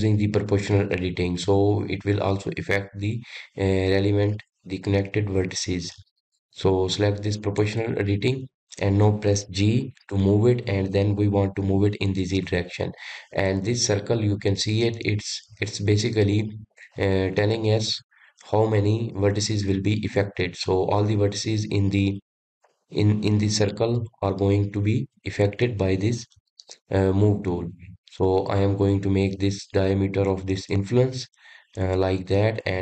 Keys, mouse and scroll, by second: 7.7 click, 10.4 g.